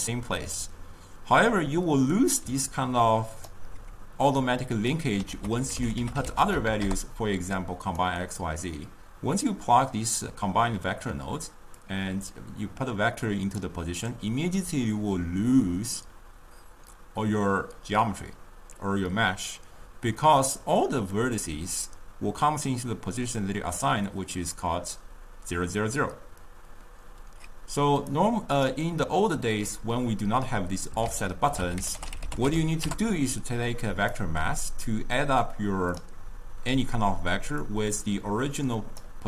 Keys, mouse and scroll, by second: 2.5 d, 2.9 right click, 3.6 d, 4.6 click, 5.6 ctrl+a, 8.2-11.4 middle drag, 11.9-15.1 drag, 28.3-31.2 drag, 31.2 ctrl+a, 35.0 drag, 37.9-39.2 drag.